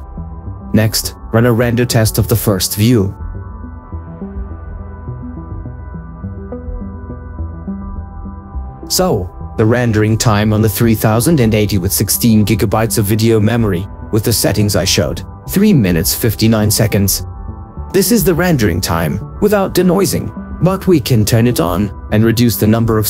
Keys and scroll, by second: 15.4 ctrl+4.